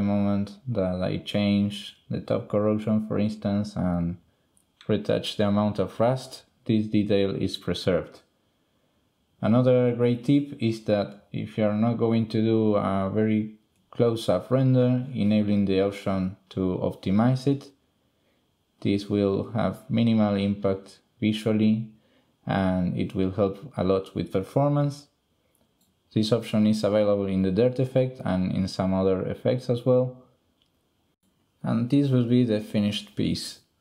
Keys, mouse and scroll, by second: 0.1-2.1 drag, 3.0-4.1 drag, 11.0 middle click, 12.6-13.1 ctrl+middle drag, 13.2 shift+middle click, 14.9 click, 17.7 click, 20.7 middle drag, 21.2 middle click, 21.6 middle click, 24.5 middle drag, 25.4-26.1 middle drag, 29.7 middle click, 30.0-32.3 middle drag, 32.5 middle click.